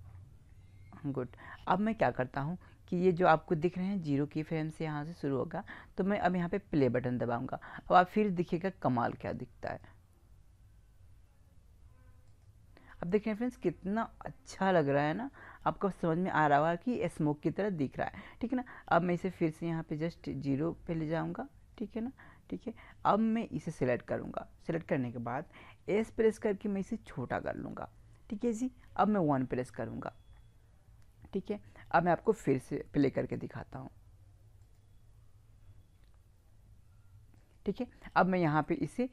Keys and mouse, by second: 9.7-11.4 drag, 12.3-14.0 drag, 19.7-21.6 drag, 22.5-23.6 middle drag, 23.6-25.4 right drag, 25.8 s, 27.5-29.2 drag, 28.9 KP_1, 34.6-36.4 drag, 37.4 click, 38.7-39.1 middle drag.